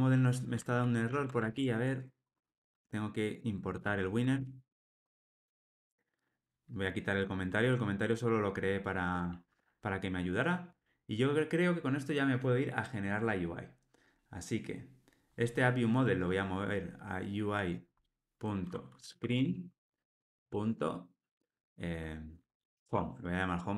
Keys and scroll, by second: 1.1 ctrl+alt+o, 1.4 alt+super+l, 4.3 alt+super+l.